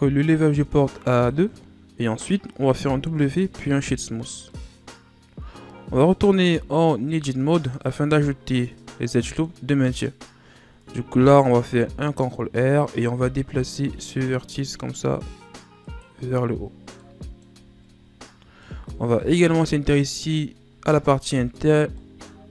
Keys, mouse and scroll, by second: 1.1 click, 2.0-3.0 scroll up 2, 3.0 w, 4.5-7.0 middle drag, 7.0 Tab, 7.7 scroll up 2, 8.6-11.5 middle drag, 11.5 ctrl+r, 16.2 Tab, 16.6-17.0 scroll down 2, 17.0-17.5 middle drag, 17.5 a, 17.9-18.6 ctrl+scroll down 7, 18.6-19.8 middle drag, 19.8-20.3 scroll down 3, 20.3-21.9 scroll up 10, 21.9-22.5 middle drag.